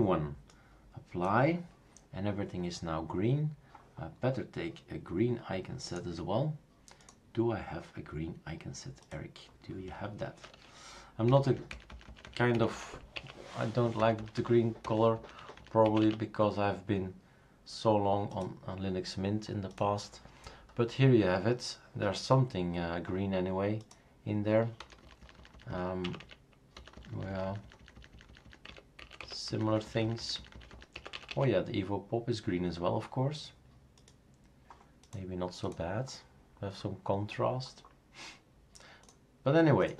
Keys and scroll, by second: 11.3 Down, 11.5 Down, 11.9 Down, 12.0 Down, 12.2 Down, 12.5 Up, 12.7 Up, 13.1 Up, 14.0 Down, 14.2 Down, 14.4 Down, 14.8 Down, 15.8 Up, 16.0 Up, 24.8 Down, 25.0 Down, 25.2 Down, 25.4 Down, 25.5 Down, 25.9 Down, 26.0 Up, 26.2 Up, 26.7 Down, 26.9 Down, 27.1 Down, 27.3 Down, 27.8 Down, 27.9 Down, 28.3 Down, 28.4 Down, 28.7 Up, 29.0 Up, 29.5 _, 29.7 Down, 30.0 Down, 30.9 Down, 31.3 Down.